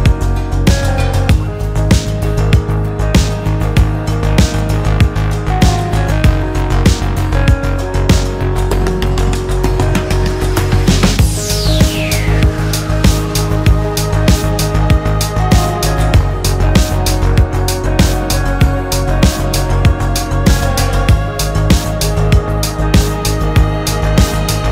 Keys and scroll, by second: 0.2 Escape, 6.5 alt+w, 10.8 alt+a, 11.8 Escape.